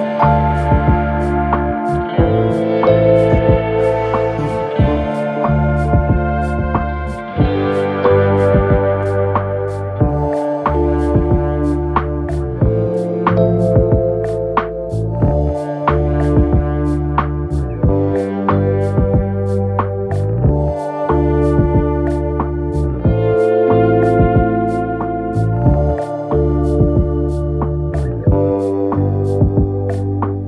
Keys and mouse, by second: 5.0 click, 6.0 KP_1, 6.1 KP_3, 6.6 shift+d, 7.8 r, 9.4-12.0 typing, 23.8 shift+a, 27.5 s, 28.5 KP_1, 29.2 s, 30.3 s.